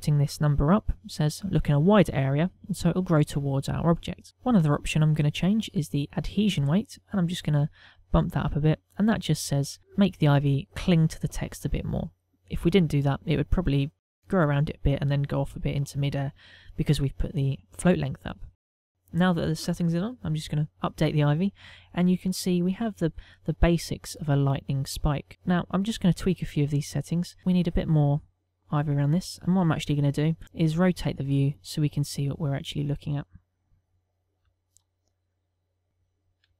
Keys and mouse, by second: 8.2 click, 8.7 click, 19.4 middle click, 21.0 click, 30.9 middle click, 33.0 middle click, 35.2 shift+middle click, 35.6 middle click, 36.0 ctrl+middle click.